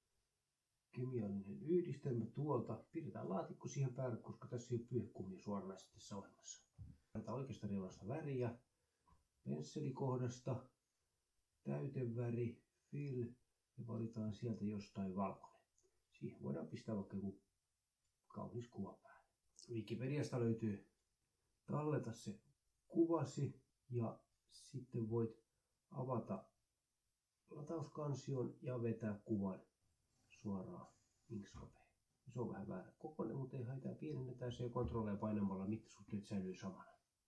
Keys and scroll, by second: 7.0 Delete, 18.1 Return, 36.8-37.2 typing.